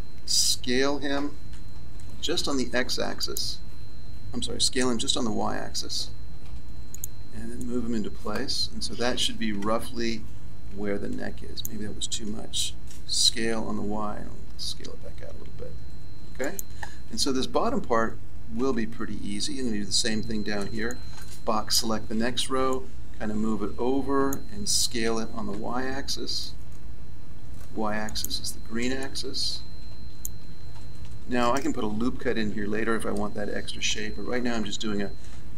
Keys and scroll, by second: 1.5 s, 4.7 s, 13.2 s, 18.5 a, 25.0 s, 34.4 a.